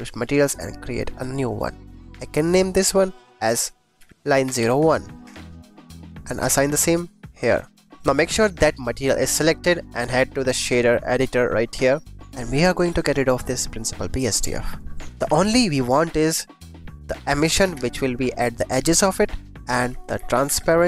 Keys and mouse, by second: 1.1 click, 2.5 click, 3.1 click, 3.3-5.2 drag, 6.4-7.7 drag, 8.7 click, 12.2 click, 12.7 click, 14.3 x, 14.8 click, 15.2 shift+a, 19.0 click, 19.1 click, 19.7 shift+a.